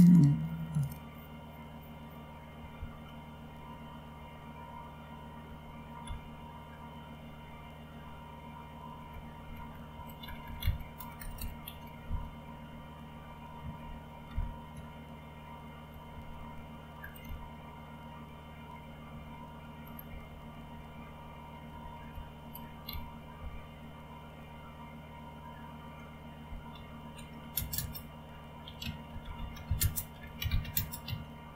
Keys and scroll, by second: 2.5 Up, 2.7 Up, 5.5 ctrl+k, 6.0 ctrl+k, 8.9 Up, 9.1 Up, 9.3 Up, 9.5 Up, 10.2 Down, 10.4 Down, 10.6 Down, 11.0 Return, 11.2 Return, 11.3 Return, 11.6 Up, 11.8 Up, 12.0 Up, 14.3 ctrl+u, 15.9 Up, 17.0 Down, 17.3 Down, 19.8 Down, 20.0 Down, 20.4 Down, 20.7 Down, 21.1 Down, 21.7 Up, 22.1 Up, 22.9 Down, 23.3 Down, 26.7 typing, 28.4-31.5 typing.